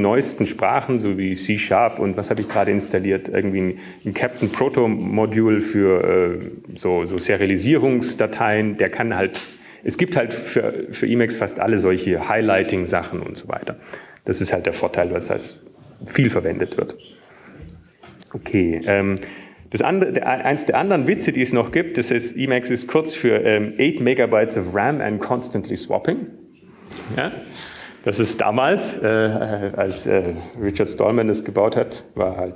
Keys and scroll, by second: 21.7 super+`.